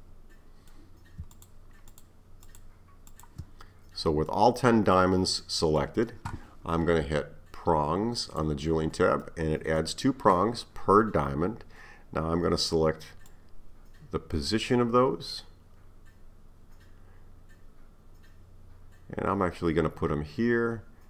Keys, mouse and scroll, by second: 0.0-1.4 middle drag, 1.4 shift+click, 1.9 shift+click, 2.5 shift+click, 3.1 shift+click, 3.7-4.3 scroll down 3, 4.3-8.2 middle drag, 8.2-9.3 drag, 9.3-12.3 middle drag, 13.3-16.4 drag.